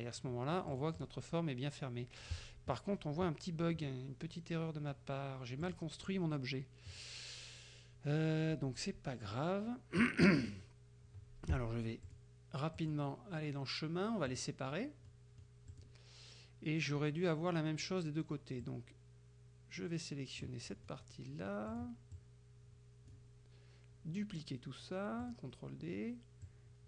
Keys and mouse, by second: 0.8-1.3 drag, 3.9-5.1 middle drag, 5.7 click, 12.1 click, 12.8 click, 14.4 click, 15.1 middle click, 15.8 click, 18.7-20.7 drag, 20.8 middle click, 21.7 click, 22.2-23.4 drag, 25.3 click, 26.5-26.8 drag.